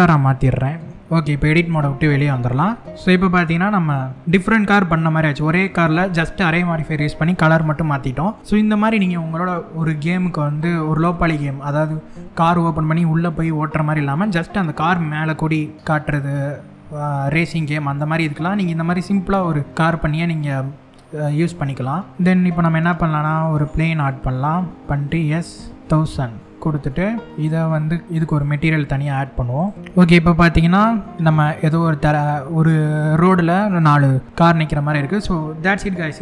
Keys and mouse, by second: 1.8 Tab, 2.7-4.9 middle drag, 22.1 shift+a, 24.6 s, 25.4 KP_1, 25.6 KP_0, 25.7 KP_0, 28.0 click, 29.2 click, 29.6 click, 29.8-30.5 middle drag, 29.8 z, 31.1 middle click.